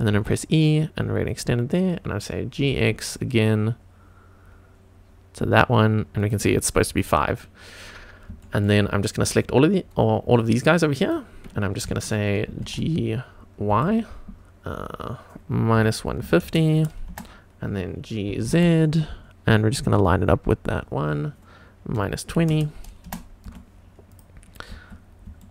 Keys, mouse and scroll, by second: 0.1 e, 1.3 click, 2.6 g, 2.7 x, 6.2 click, 6.9-7.3 scroll down 3, 8.0 scroll up 1, 8.4 shift+middle click, 8.9-9.3 scroll down 1, 10.4 click, 12.5 g, 12.7 x, 13.7 y, 15.7 KP_Subtract, 16.2 KP_1, 16.2 KP_5, 16.5 KP_0, 17.1 Return, 18.3 g, 18.5 z, 22.0 KP_Subtract, 22.4 KP_2, 22.5 KP_0, 23.0 Return, 23.5 Tab, 24.1 click, 24.5-24.9 scroll down 2, 25.0 scroll up 1, 25.4 shift+middle drag.